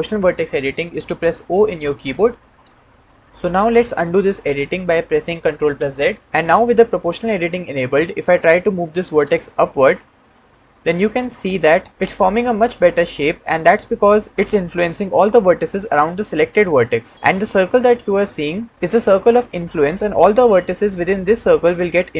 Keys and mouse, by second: 1.5 o, 2.3 o, 5.8 ctrl+z, 9.0 g, 9.6 z.